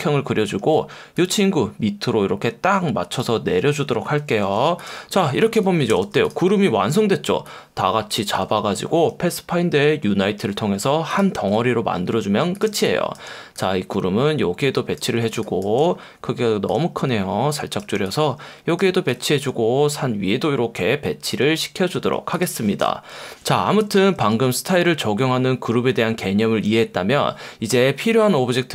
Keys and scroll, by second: 0.6 F1, 4.4 super+y, 5.6 Escape, 5.9 v, 9.1 F1, 10.4 F1, 12.7 space, 15.3 space, 23.1 super+0, 24.3 F1, 26.7 F1.